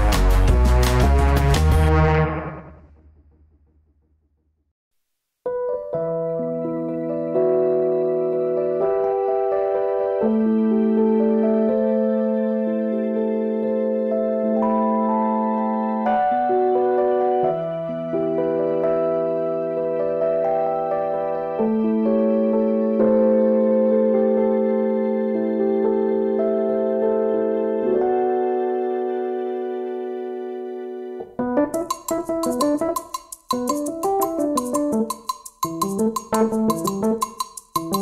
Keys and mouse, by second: 1.4 ctrl+b, 16.4 click, 20.2 click, 23.0 click, 23.3 g, 26.0 click, 31.6 alt+z, 32.3 alt+z, 33.3 click, 33.8 g.